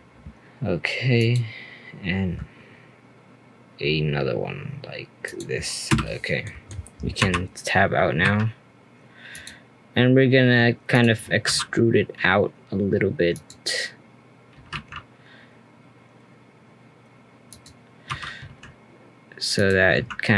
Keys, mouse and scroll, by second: 6.2 scroll down 2, 6.4 middle click, 7.2 /, 8.2 3, 9.3 click, 10.9 shift+click, 11.4 e, 14.5 g, 18.1 r, 19.9 e.